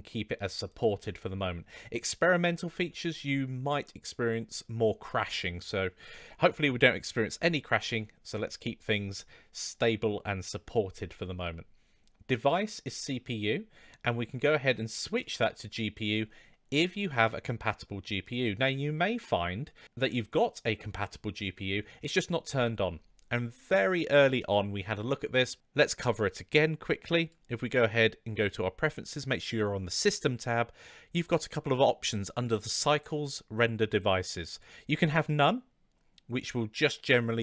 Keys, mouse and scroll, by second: 1.7-6.7 drag, 15.3-22.7 drag, 24.3-27.3 drag.